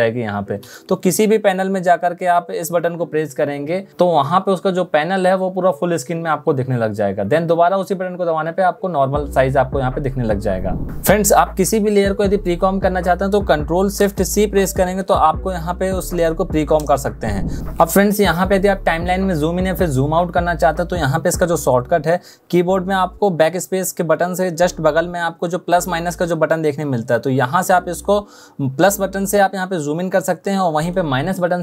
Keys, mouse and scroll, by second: 13.4 ctrl+shift+c, 30.7 -.